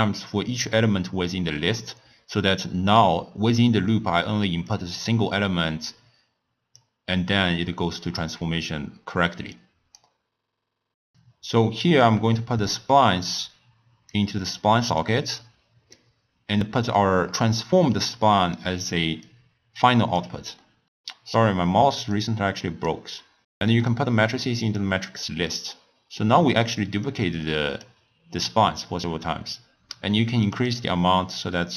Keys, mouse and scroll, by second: 4.7 drag, 8.2-9.5 middle drag, 9.5 click, 10.2 scroll down 1, 10.5 scroll up 2, 10.7 middle click, 11.1 click, 12.6 click, 14.5 click, 15.4 click, 16.1-16.9 scroll up 1, 16.9 click, 19.2-20.6 drag, 20.6 middle click, 20.9 scroll up 1, 21.0 scroll down 1, 21.2 scroll up 1, 21.4 middle click, 21.5 scroll down 1, 21.6-22.0 scroll up 3, 22.0 scroll down 1, 22.3-22.8 scroll up 3, 22.8 click, 23.0 scroll down 1, 23.1 middle click, 23.2 click, 23.9-26.2 drag, 26.2-27.0 middle drag, 27.0-30.0 drag, 30.4-31.4 drag.